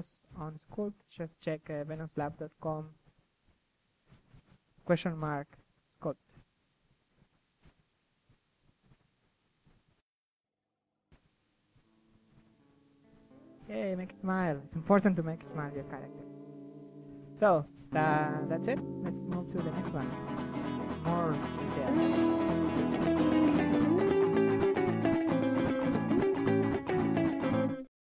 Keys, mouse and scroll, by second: 0.0-3.4 middle drag, 3.4 s, 3.7-4.4 drag, 4.1 KP_3, 4.5 g, 4.7-5.1 drag, 5.1 g, 5.3-5.8 drag, 6.5-7.6 drag, 7.6 KP_3, 7.9-9.3 drag, 9.3-9.8 middle drag, 9.8 s, 9.9 click, 10.2 KP_3, 10.5 click, 10.8 g, 11.3 click, 11.6 KP_3, 13.2 KP_3, 13.6 g, 15.0-15.6 drag, 15.5 ctrl+z, 15.6 ctrl+z, 15.8 KP_3, 17.2 ctrl+z, 17.4 KP_1, 17.9-18.6 drag, 18.6 ctrl+z, 19.4 ctrl+z, 19.7 f, 20.7 ctrl+z, 21.6 KP_3, 21.7 KP_1, 22.2 KP_3, 22.5 click, 23.2 ctrl+z, 23.3 KP_3, 23.8 ctrl+z, 24.4 click, 24.8 s.